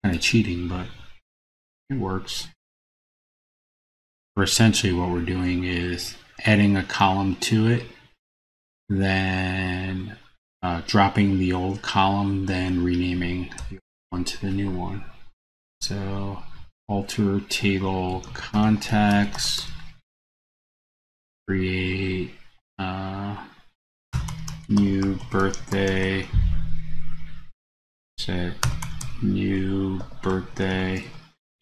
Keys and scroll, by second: 0.8 super+c, 4.1 super+v.